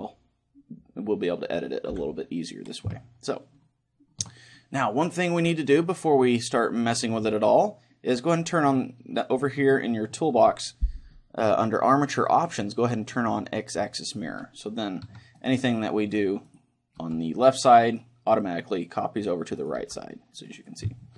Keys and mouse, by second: 1.9 KP_1, 3.0-5.7 middle drag, 5.7-7.8 drag, 13.1-14.9 drag, 15.1 a, 15.4-21.1 right drag, 17.0 g, 19.8 g, 21.0-21.1 middle drag.